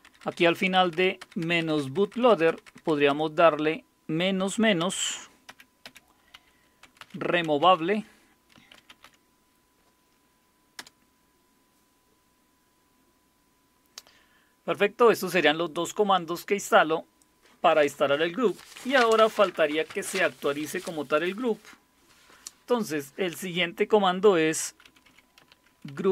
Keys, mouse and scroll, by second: 0.0-2.9 typing, 4.8-9.5 typing, 10.8 Return, 24.6-26.1 typing.